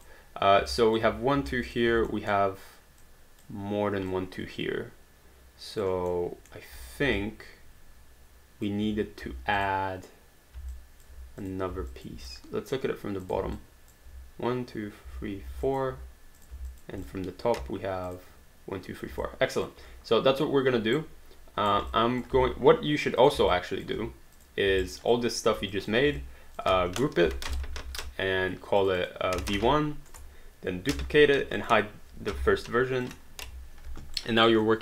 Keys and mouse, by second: 0.0 click, 0.7 alt+click, 1.7 click, 2.2 alt+middle click, 3.0 alt+click, 4.4 alt+click, 6.1 alt+middle click, 6.9 click, 7.2 alt+click, 9.6 click, 10.8 alt+click, 11.9 alt+click, 13.5 alt+click, 15.6 alt+click, 16.7 alt+click, 18.2 click, 19.2 alt+click, 21.0 right click, 21.9 alt+click, 22.3 alt+d, 23.2 click, 23.5 alt+click, 24.4 click, 24.8 alt+right click, 25.2 alt+click, 25.7 click, 26.2 alt+click, 27.6 ctrl+g, 28.8 click, 29.1-30.1 typing, 30.2 Return, 30.9 ctrl+d, 31.6 click, 32.4 h, 33.1 click, 34.5 alt+right click, 34.6 alt+click.